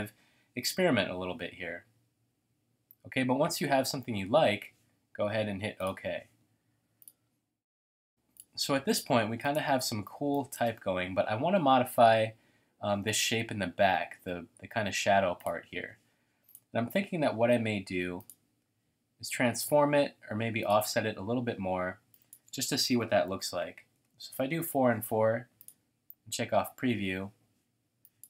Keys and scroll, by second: 0.4-1.1 typing, 10.2 space, 23.0-23.8 typing, 24.1 Tab.